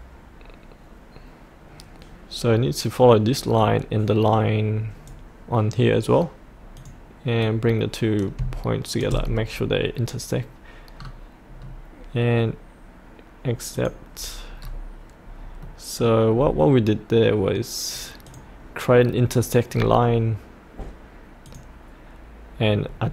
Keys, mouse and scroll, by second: 9.6-10.9 scroll up 1, 13.7 click, 14.6 scroll up 1, 15.6 middle click, 16.3-18.2 scroll down 1, 18.2 click, 19.7-21.4 scroll down 1, 21.4 click, 22.8-23.1 scroll down 1.